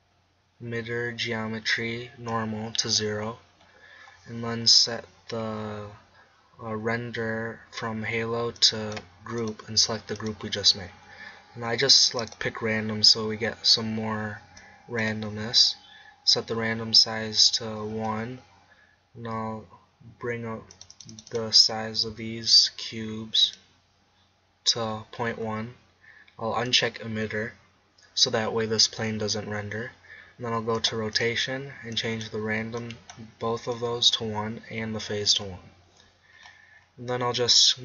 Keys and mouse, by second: 2.3-4.0 drag, 4.0-7.6 middle drag, 8.6-11.4 drag, 12.2-13.9 drag, 20.7 click, 22.1 z, 23.3 middle click, 25.1 middle click, 35.6 middle click.